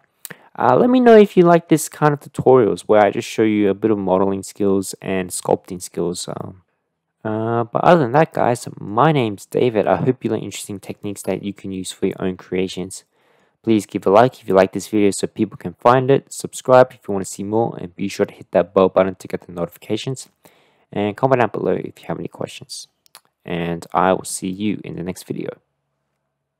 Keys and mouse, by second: 6.4 middle drag, 8.0-8.8 middle drag, 9.6-11.1 middle drag, 12.1-13.4 middle drag, 18.6-20.3 middle drag, 24.1-24.5 middle drag, 24.6 middle click.